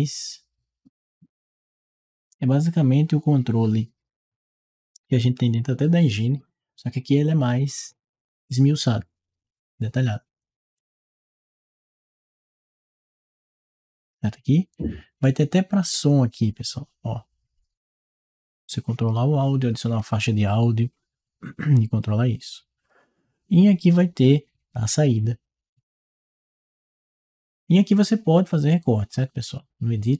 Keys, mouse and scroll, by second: 10.6-12.0 drag, 15.7 click, 24.9 click.